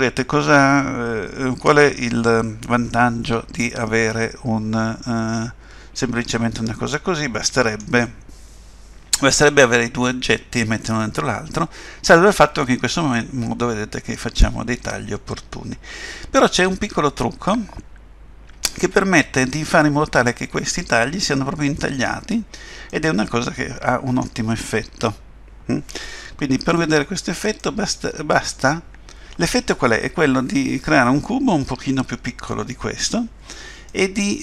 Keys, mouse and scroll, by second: 11.0 middle click, 12.6 middle click, 22.9 middle click, 26.7 Tab, 27.6 middle click, 33.9 middle click.